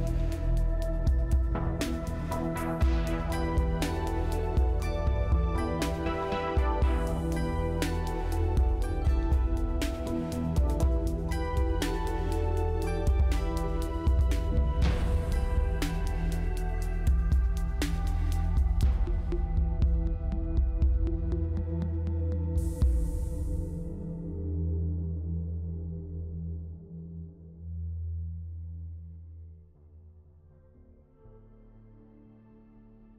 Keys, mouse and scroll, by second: 5.9-6.8 scroll up 4, 6.9 scroll down 2, 8.4 scroll down 1, 8.5 scroll up 1, 9.2 scroll up 1, 15.3 double click, 22.2-22.5 scroll up 2, 22.8 scroll up 1, 23.2 scroll down 2, 24.0-25.0 scroll down 1, 25.0 scroll up 3, 26.4-27.2 scroll down 4.